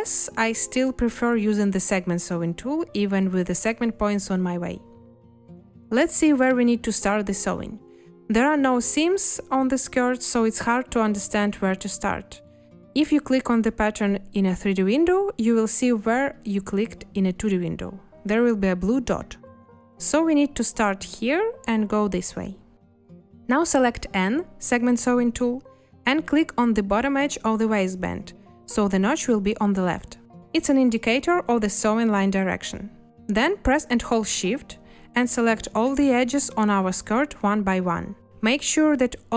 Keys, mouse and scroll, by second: 4.5 a, 24.0 n.